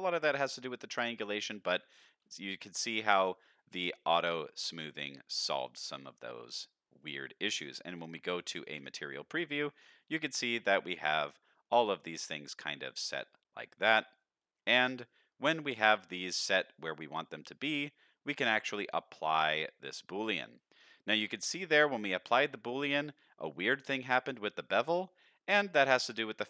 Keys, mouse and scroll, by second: 0.0 shift+middle drag, 0.4-0.7 scroll up 2, 0.7 middle drag, 2.3 shift+middle drag, 2.6 middle drag, 3.4 shift+middle drag, 4.3 middle drag, 5.4 middle click, 5.7-6.0 scroll down 1, 6.0-6.4 middle drag, 6.4-7.0 scroll down 2, 7.0 middle drag, 7.9 z, 9.3-9.6 middle drag, 10.0-10.8 scroll up 2, 10.3-10.8 middle drag, 11.3 middle drag, 11.9-12.2 middle drag, 12.7-13.3 middle drag, 13.7-14.2 middle drag, 14.4-14.9 middle drag, 15.2 z, 16.0 middle click, 16.6-17.2 middle drag, 18.2-20.2 drag, 20.9-21.2 middle drag, 21.6-22.0 scroll down 1, 22.0 middle click, 24.2 click.